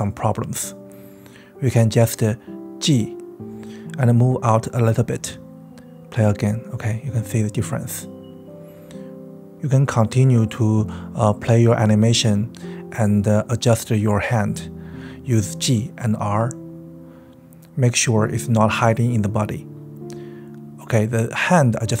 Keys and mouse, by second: 0.0 middle click, 0.0 right click, 0.5 KP_1, 1.3-6.9 drag, 1.6 g, 7.5-9.0 typing, 8.1 click, 8.4 click, 9.2-9.9 drag, 10.0 click, 10.1-17.5 typing, 10.7 drag, 11.6 middle click, 12.7 click, 13.2 click, 13.7-14.1 drag, 14.9 click, 15.2 drag, 15.7 click, 16.1 click, 16.4 click, 16.7-17.5 drag, 17.9-19.2 drag, 19.3 click, 19.4-22.0 typing, 20.3 click, 20.7 click, 21.2 click, 21.5 middle click.